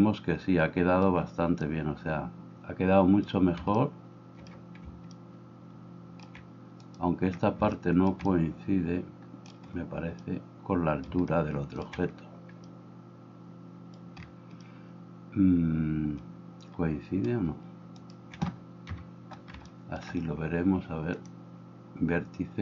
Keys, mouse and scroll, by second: 1.2 h, 6.9 middle click, 6.9 right click, 18.0 middle click, 18.0 right click.